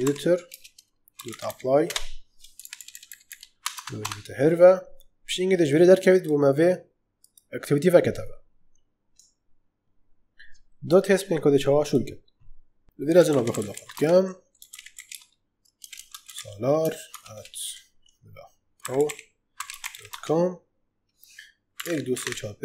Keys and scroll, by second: 0.0-1.9 typing, 2.5 ctrl+Left, 3.7 Tab, 12.8-17.0 typing, 18.4-20.3 typing, 21.7 1.